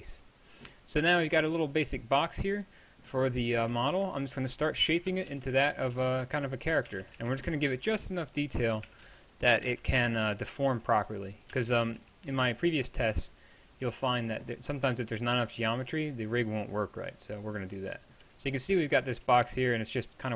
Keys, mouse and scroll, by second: 3.6 KP_1, 4.0 KP_3, 5.1 a, 5.3 b, 5.8 g, 8.9 a, 9.0 b, 9.7 g, 11.5 g, 18.3 Tab, 19.1 z.